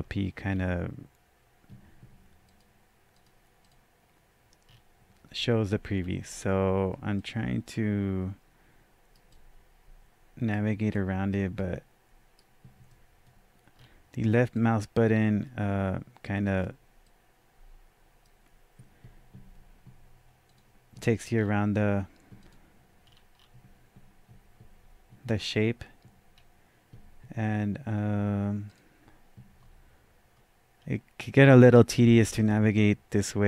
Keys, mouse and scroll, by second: 0.5-0.8 scroll down 1, 2.4 click, 3.1 click, 3.6 click, 4.7-5.3 scroll down 1, 5.3-5.6 scroll up 1, 5.7-7.2 middle drag, 6.0 scroll down 1, 6.5-6.9 scroll up 1, 7.2-14.2 right drag, 9.3 click, 10.9 click, 12.9-14.5 middle drag, 13.8-14.2 scroll down 1, 14.2-14.5 scroll up 1, 14.5-22.4 drag, 21.3-22.0 scroll down 1, 23.0-23.4 scroll down 1, 25.2-28.1 scroll down 1, 28.6 click, 29.6-30.3 scroll up 1, 30.3 scroll up 1, 30.8-32.4 scroll down 1, 32.5-33.4 drag.